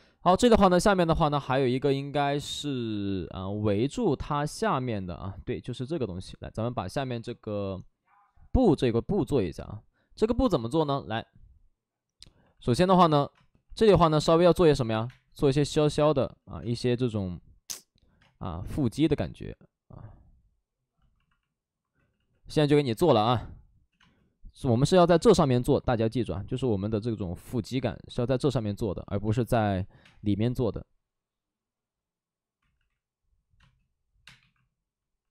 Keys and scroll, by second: 9.2 alt+s, 12.4 alt+s, 13.2-14.9 typing, 16.3 ctrl+z, 16.5 space, 21.9 ctrl+z, 22.9 space, 22.9 1, 24.8 ctrl+z, 24.8 space, 29.9 space, 29.9 5, 32.7 ctrl+z, 33.5 space, 34.3 1.